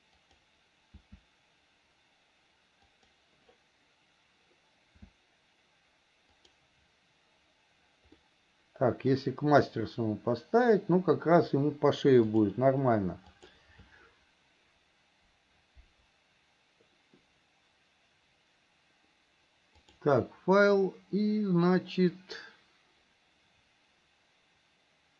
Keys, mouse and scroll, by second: 1.3 s, 5.2 s, 8.5-9.5 middle drag, 12.6-14.4 drag, 20.1-25.1 drag.